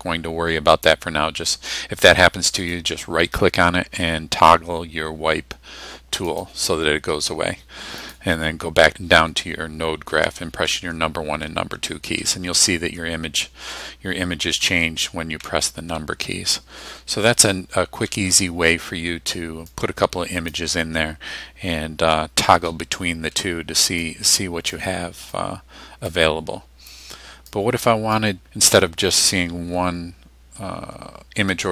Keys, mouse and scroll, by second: 2.7 middle click, 6.3 click, 8.1 click, 10.8 1, 11.6 2, 12.3 1, 12.8 2, 14.7-17.4 typing, 18.7 2, 19.8 click, 21.5 scroll down 1, 22.1-22.4 scroll down 2, 22.7 middle click, 22.8 scroll up 2, 24.1-24.9 drag, 25.4-26.3 drag, 26.9-27.7 drag, 28.2 click, 29.6 1, 31.6 2.